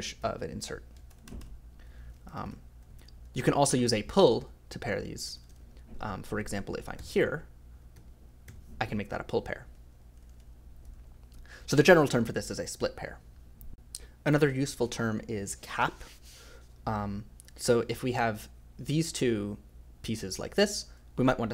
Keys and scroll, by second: 0.2 k, 1.1 ctrl+z, 1.2 ctrl+z, 1.4 ctrl+z, 2.0-8.5 typing, 5.4 ctrl+z, 5.5 ctrl+z, 9.6 ctrl+z, 9.9 ctrl+z, 10.1 ctrl+z, 10.2 ctrl+z, 10.3 ctrl+z, 10.8 ctrl+z, 11.6 j, 11.7 j, 13.3 f.